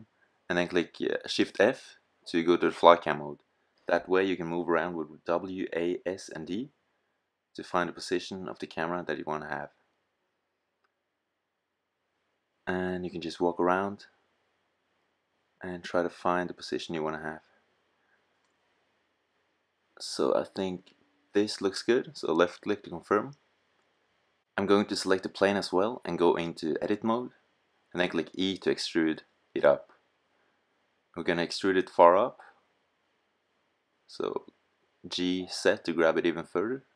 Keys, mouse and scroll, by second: 0.7-1.7 middle drag, 6.8-11.9 middle drag, 23.4 click, 27.9 e, 32.4-34.0 drag, 34.0 right click, 34.4 g, 36.8 click.